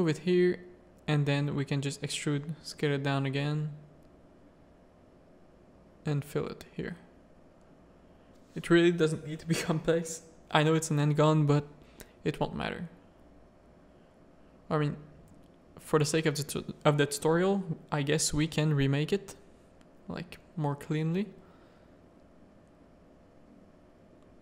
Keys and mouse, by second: 0.2 e, 1.4 s, 2.3 click, 3.1 middle click, 4.2 ctrl+z, 4.4 ctrl+z, 5.3 f, 5.8 middle click, 6.2 Tab, 6.7 z, 8.9-10.5 drag, 10.9 Tab, 11.4 z, 11.8 x, 12.7 a, 13.1 middle click, 13.6 shift+middle click, 14.2 middle click, 15.3 alt+click, 15.8 x, 16.7 a, 17.9 ctrl+z, 18.4 ctrl+z, 19.1 x, 19.6 a, 19.7 middle click, 20.6 alt+click, 20.9 middle click, 22.3 s, 23.2 a, 23.4 click, 23.9 middle click.